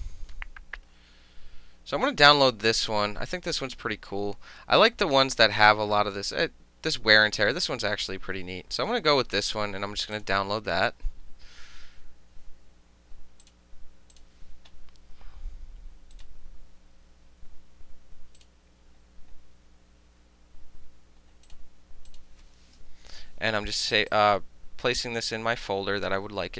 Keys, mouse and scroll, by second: 10.2 click, 11.1 middle click, 11.5 middle click, 13.5 click, 14.2 click, 16.2 right click, 18.4 click, 21.5 click, 22.1 click, 24.0 click, 24.1 click.